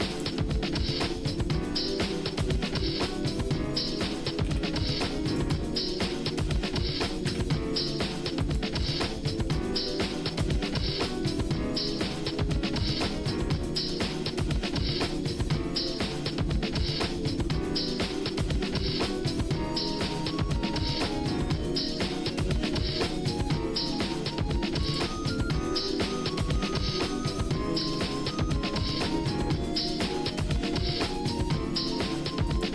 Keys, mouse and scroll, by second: 0.5 middle click, 1.2 shift+middle click, 2.3 shift+middle click, 4.4 r, 7.2 e, 8.9 shift+middle click, 12.4 e, 14.1-17.3 shift+middle drag, 17.6 middle click, 18.2-19.3 shift+middle drag, 19.7 middle click, 20.1 shift+middle click, 20.7-21.1 scroll down 2, 21.1 middle click, 21.7 shift+middle click, 22.4-23.4 scroll up 4, 23.4 shift+middle click, 24.1 middle click, 24.8 shift+click, 25.3 shift+middle click, 25.8 middle click, 27.7 shift+d, 30.4 middle click, 31.1 shift+middle click, 32.5 click.